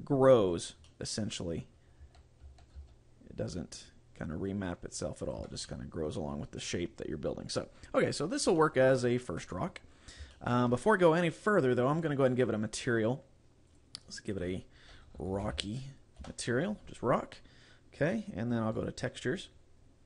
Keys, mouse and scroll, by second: 0.8 click, 0.9 middle click, 2.1 a, 2.7 a, 2.9 s, 5.4 click, 5.5 Tab, 5.7 middle click, 8.7 middle click, 9.9-10.4 scroll down 2, 10.4 shift+middle click, 12.0 click, 13.8 click, 14.4 click, 18.8 click, 19.4-20.0 scroll up 4.